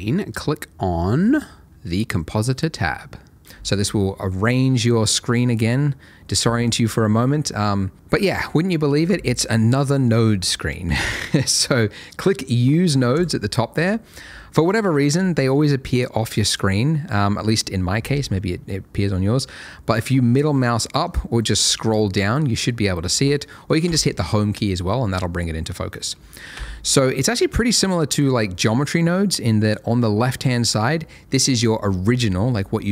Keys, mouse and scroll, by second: 0.5 middle click, 2.8 click, 13.1 click, 20.3 middle click, 21.3-21.6 scroll down 1, 21.6-22.2 scroll up 1, 22.2 middle click, 23.8 Home, 25.7 middle click, 26.5 n, 26.9-27.5 scroll up 1, 27.5 click.